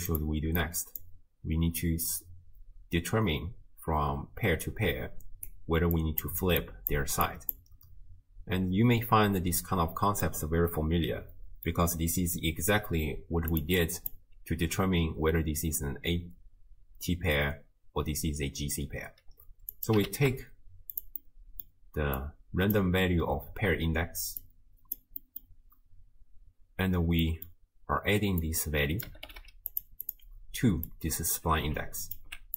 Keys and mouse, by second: 0.1 click, 0.7 click, 3.5-7.1 d, 6.0 click, 6.6 click, 7.3 click, 7.3-9.4 d, 10.3-11.7 drag, 13.6 click, 13.9 click, 19.9 click, 20.1 ctrl+shift+d, 21.2 middle click, 22.2-22.8 drag, 24.4 click, 25.2 middle click, 27.3 middle click, 28.4-30.2 drag, 29.4 d, 30.9-32.2 drag.